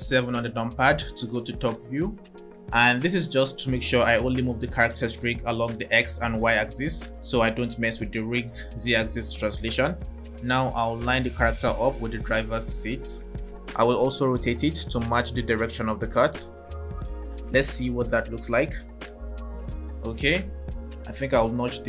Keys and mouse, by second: 0.0 KP_7, 3.5 g, 13.7 r, 16.8 click.